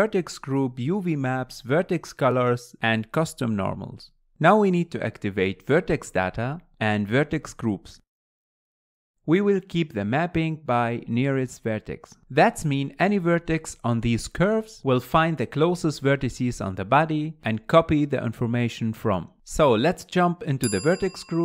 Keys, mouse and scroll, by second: 0.0-3.9 drag, 5.4 click, 7.1-9.6 drag, 16.2-17.6 drag, 19.8 click.